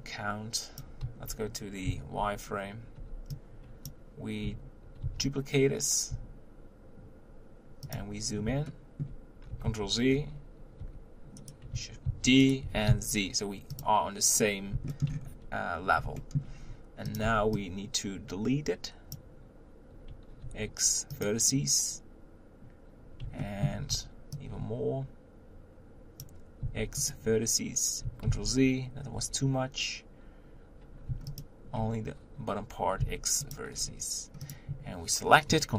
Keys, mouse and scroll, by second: 2.2 z, 3.9 b, 5.0 shift+d, 8.2-8.7 scroll up 3, 8.7-9.6 shift+middle drag, 9.6 ctrl+z, 10.1-10.8 scroll down 3, 10.8 g, 12.1 shift+d, 12.6 g, 14.9 shift+middle click, 15.1-15.4 scroll up 4, 16.2-16.6 shift+middle drag, 16.6-17.1 scroll up 1, 17.1 click, 17.2 b, 21.2 x, 23.4-26.2 shift+middle drag, 26.2 b, 27.1 x, 28.3 ctrl+z, 28.8 scroll up 1, 31.4 alt+click, 33.5 x, 33.7-34.5 scroll down 1, 34.5 click.